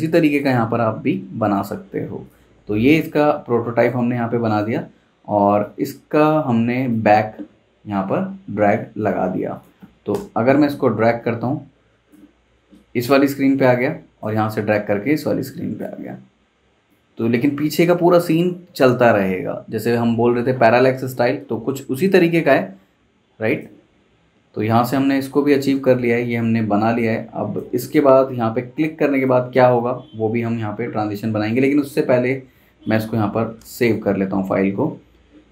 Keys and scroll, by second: 10.1 super+Return, 29.5 super+s, 31.2 Escape, 33.4 alt+shift+super+s.